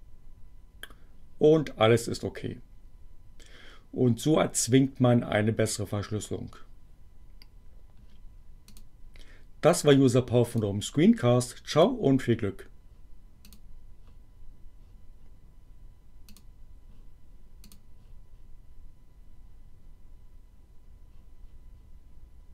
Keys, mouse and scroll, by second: 8.7 click, 10.5 click, 11.7 click, 13.5 click, 16.3 click, 17.5 click.